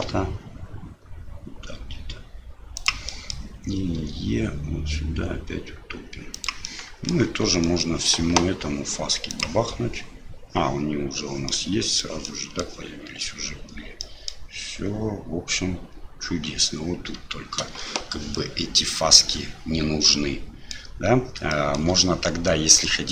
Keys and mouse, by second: 3.1 click, 6.3 e, 6.7 click, 7.3 Tab, 7.6 drag, 9.4-10.4 drag, 11.5-12.0 middle drag, 12.2-12.6 middle drag, 14.0 middle click, 18.3-19.2 drag, 20.1-20.7 drag, 21.5 shift+drag.